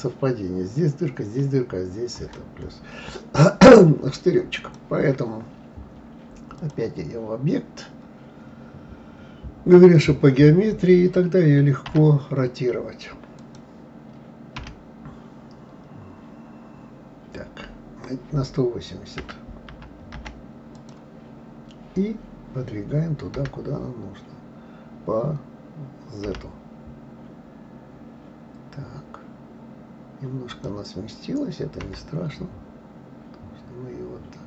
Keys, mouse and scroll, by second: 4.6 click, 6.5-9.6 drag, 11.9 r, 13.4 click, 14.6 r.